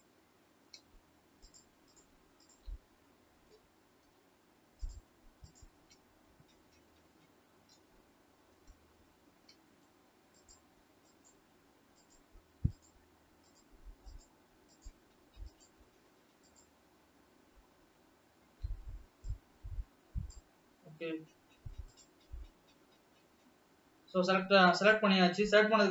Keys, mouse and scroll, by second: 0.4 scroll up 2, 1.6 shift+click, 2.1-5.8 shift+drag, 7.9 KP_1, 10.4 shift+drag, 11.2-12.0 shift+drag, 12.8 shift+click, 13.8 shift+click, 14.2 shift+click, 14.8-15.5 shift+drag, 17.1 shift+click, 17.8 shift+click, 19.3 shift+click, 20.8 shift+scroll up 2.